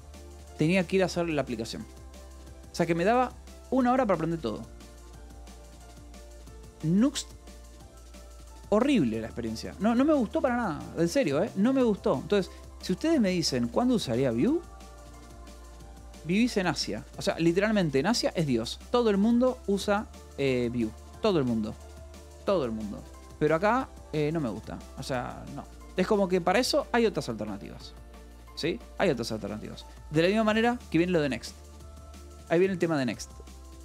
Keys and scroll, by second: 0.5 Escape, 2.8 l, 3.4 v, 4.0 e, 4.1 Escape, 10.2 Escape, 11.0 f, 11.5 Escape, 11.9 d, 12.1 Escape, 13.0 a, 13.6 =, 13.8 space, 15.2-17.4 typing, 18.4 o, 19.2 Escape, 19.5 k, 20.9-22.3 typing, 24.2 shift+m, 24.7 j, 25.9 k, 26.9 Left, 27.4 j, 27.8 ,, 28.5 Escape, 29.0 j, 29.9 Escape, 30.1 j, 32.4 o.